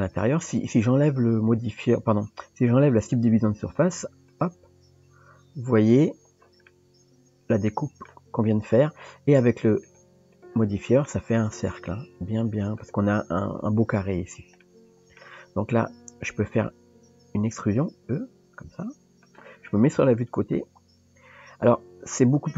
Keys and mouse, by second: 4.4 click, 5.9 click, 6.7-8.1 middle drag, 9.9 click, 10.4 click, 11.0 middle click, 14.7 middle click, 20.0 KP_3.